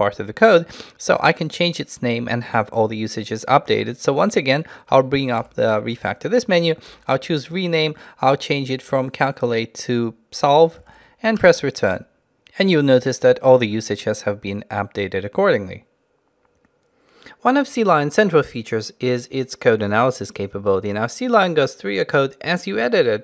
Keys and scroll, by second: 5.5 ctrl+alt+shift+t.